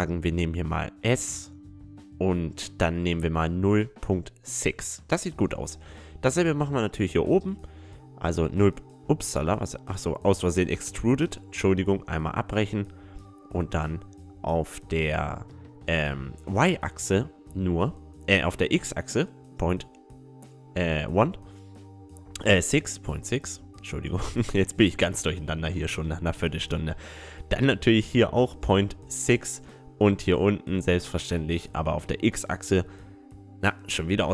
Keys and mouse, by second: 2.8 s, 6.6-8.4 right drag, 7.0 e, 10.0 s, 16.2 ctrl+z, 17.5 s, 20.5 click, 20.7-22.6 middle drag, 21.1-22.9 right drag, 21.7 s, 24.8 s, 26.8 s, 29.4 middle click, 30.0 middle click, 30.4-32.7 right drag, 31.5 e.